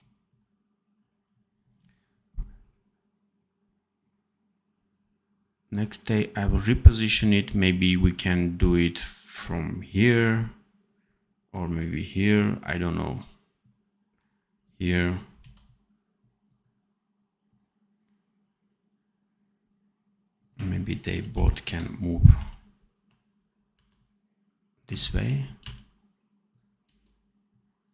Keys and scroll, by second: 15.3 c, 21.1 ctrl+b, 22.9 1, 23.6 v, 24.8 c, 25.5 v, 26.8 space.